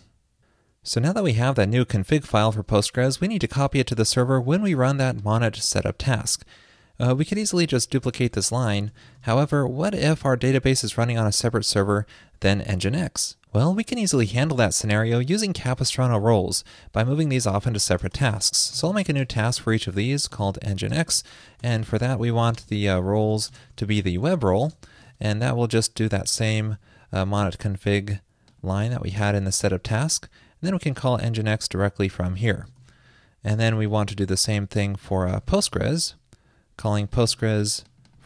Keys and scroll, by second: 7.8 ctrl+shift+d, 8.1 alt+shift+Left, 22.6 alt+BackSpace, 24.4 super+Right, 26.9 shift+super+Left, 27.4 super+c, 29.1 super+v, 35.6 ctrl+shift+d, 37.4 super+c.